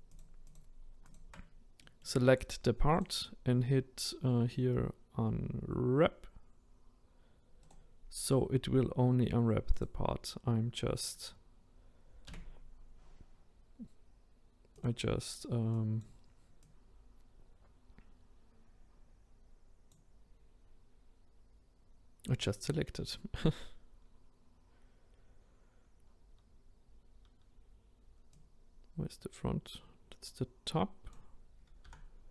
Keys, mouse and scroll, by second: 0.2 shift+click, 1.1 shift+click, 1.8 middle click, 2.3-4.4 scroll up 1, 9.8-12.3 right drag, 12.3 s, 16.0 click, 16.7 click, 28.4 click, 31.9 r.